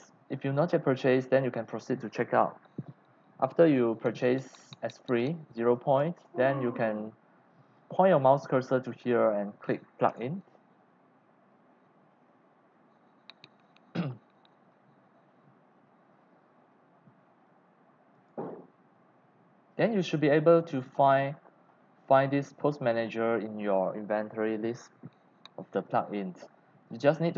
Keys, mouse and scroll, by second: 3.4 click, 3.8 right click, 4.1 click, 5.8 click, 10.1-14.0 drag, 14.0 middle click, 14.0-17.4 scroll down 57, 18.1 click, 19.9 scroll down 3, 21.0 scroll, 21.0-21.4 scroll up 3, 21.7-22.5 scroll down 4, 23.1 scroll down 4, 25.4-26.2 scroll.